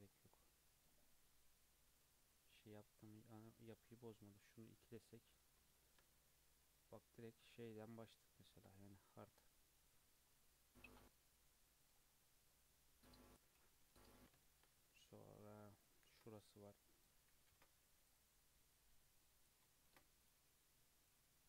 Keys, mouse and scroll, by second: 0.0 scroll down 2, 0.3-1.0 middle drag, 1.0 scroll down 2, 1.3-2.1 middle drag, 2.1 Tab, 2.8 Tab, 4.9 click, 5.5 scroll down 1, 5.7-7.6 shift+middle drag, 7.6 Tab, 8.0-8.4 scroll up 2, 8.4 shift+middle click, 8.9-9.2 scroll up 2, 9.2 2, 10.0 Tab, 10.2 scroll down 1, 10.4-12.1 middle drag, 12.1-12.5 scroll down 4, 12.5-13.8 middle drag, 13.8 KP_3, 14.4-14.8 shift+middle drag, 14.8 Tab, 15.7 scroll up 2, 16.1 ctrl+r, 17.2 ctrl+z, 17.4 ctrl+r, 19.8 ctrl+r.